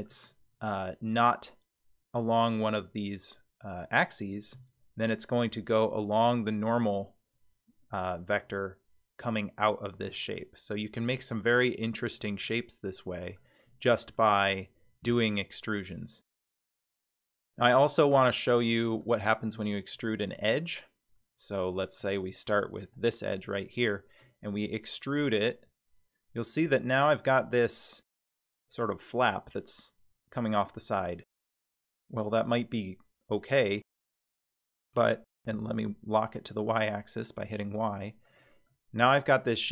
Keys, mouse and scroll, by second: 4.6 e, 10.2-11.9 middle drag, 12.4-13.4 middle drag, 13.6-14.2 scroll down 1, 14.2-16.7 middle drag, 14.2-14.5 scroll down 2, 19.0 click, 19.9 scroll up 3, 20.6-22.0 middle drag, 22.8 click, 23.3 middle click, 24.5 e, 38.7-39.7 middle drag.